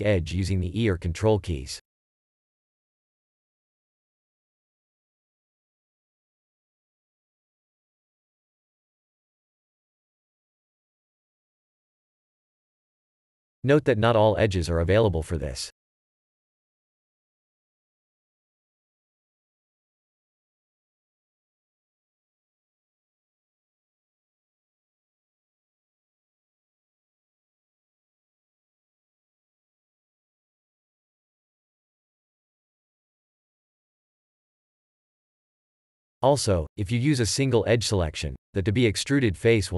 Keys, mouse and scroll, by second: 3.2 shift+e, 7.2 a, 22.8 click, 25.0 w, 28.4 click, 29.1 3, 30.0 scroll down 1, 31.4 scroll down 1, 36.5 Tab, 38.3 click.